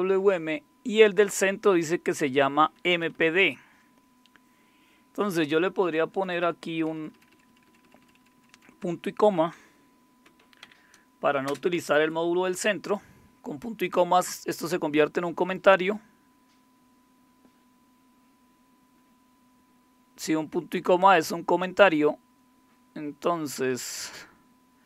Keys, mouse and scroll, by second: 2.3 Down, 2.7 Left, 2.9 Left, 3.1 Left, 6.0 Left, 6.2 Left, 6.4 Left, 6.6 Left, 6.8 Left, 7.2 Left, 7.3 Left, 7.6 Left, 7.8 Left, 8.0 Left, 8.4 Left, 8.5 Left, 8.9 Left, 10.8 ;, 11.5 space, 21.0 click, 22.3-24.4 scroll down 1, 24.4-24.8 scroll down 1.